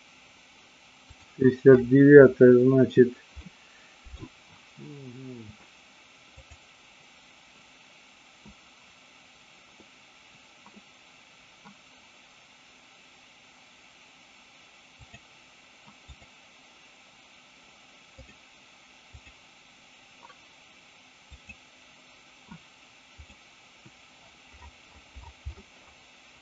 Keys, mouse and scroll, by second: 1.1-2.1 drag, 3.4-4.1 middle drag, 6.3-7.3 drag, 16.1 click, 18.1-22.0 drag, 23.3-26.4 drag.